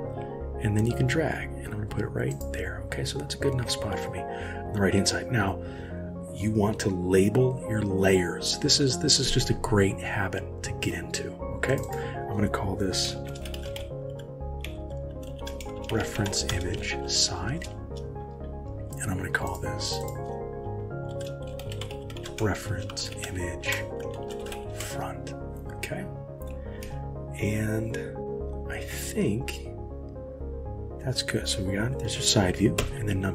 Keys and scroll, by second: 23.4 space, 32.8 KP_1.